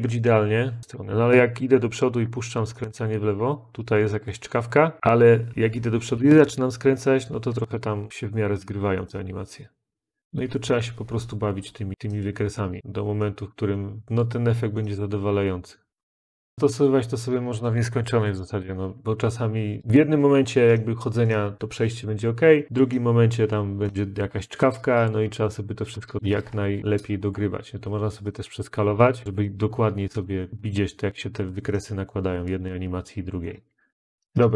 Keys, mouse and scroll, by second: 0.3 Up, 0.8 Left, 0.9 Left, 1.1 Left, 1.2 Left, 1.3-2.7 Left, 5.3 Left, 6.1-8.3 Left, 11.9 click, 12.8 click, 14.0 click, 16.1 click, 16.5 Right, 19.8 click, 26.2-26.5 middle click, 26.3 middle click, 26.7 scroll, 26.8 middle click, 26.9-27.2 middle click, 27.2 middle click, 28.9 click, 29.3 click, 32.5 click, 33.3-33.8 middle click, 33.9 Left.